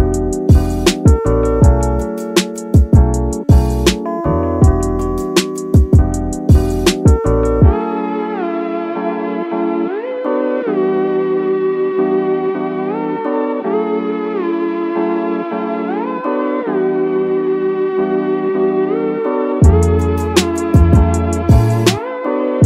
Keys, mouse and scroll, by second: 0.0-4.6 drag, 6.0 click, 9.7 click, 12.9 Tab, 13.6-13.9 scroll up 2, 13.9 shift+middle click, 16.4 click, 18.4 g, 19.0 x, 19.2 x.